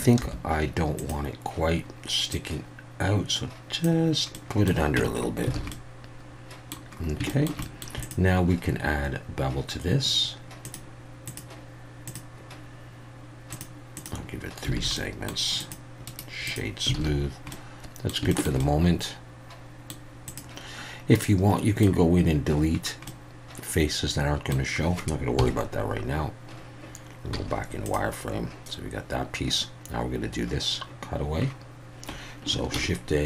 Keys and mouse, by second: 0.2 3, 2.4-3.8 drag, 4.4 middle click, 5.0 Tab, 5.5 alt+a, 5.7-6.7 middle drag, 7.3 shift+middle click, 7.6 middle click, 11.3-12.2 drag, 13.5 click, 14.0 click, 14.7 alt+a, 14.9 middle click, 15.6 click, 16.2 right click, 17.0 alt+a, 17.5-18.1 middle drag, 18.3 shift+middle click, 18.6-19.9 middle drag, 20.3 click, 21.2-21.8 middle drag, 23.1-24.5 middle drag, 25.4 KP_1, 27.3 z, 32.7 shift+a.